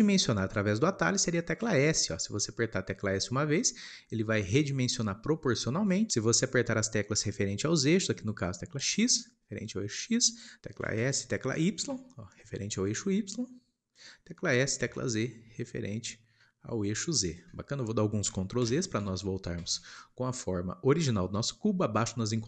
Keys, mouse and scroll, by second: 1.6 s, 18.5 ctrl+z, 18.9 ctrl+z.